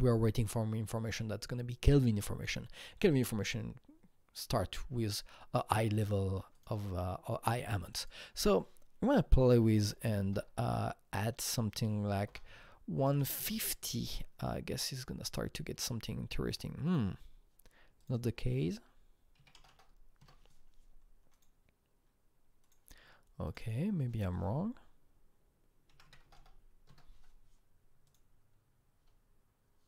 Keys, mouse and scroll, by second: 6.5 click, 7.8-9.7 drag, 9.7 KP_1, 10.0 KP_0, 10.2 KP_0, 12.1 BackSpace, 12.2 BackSpace, 13.0 KP_5, 13.2 KP_0, 13.3 Return, 14.8 click, 18.1-19.3 drag, 19.3 KP_3, 19.5 KP_0, 19.7 KP_0, 20.1 Return, 21.3 click, 22.6 click, 23.4 click, 23.6 double click, 25.9 KP_1, 26.0 KP_5, 26.2 KP_0, 26.4 KP_0, 26.8 KP_Enter, 28.0 click.